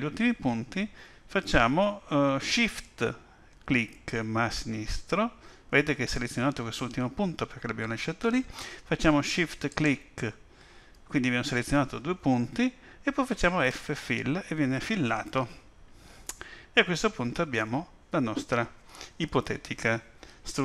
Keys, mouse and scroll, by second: 9.7 shift+click, 13.7 f, 17.5 alt+a.